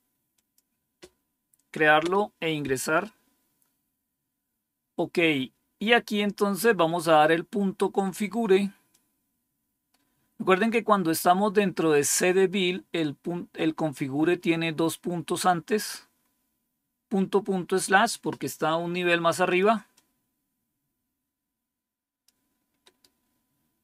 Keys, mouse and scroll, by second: 0.3 click, 1.9 Return, 6.4 scroll down 3, 8.8-10.6 drag, 19.4 click, 19.9-22.2 drag, 22.8 right click.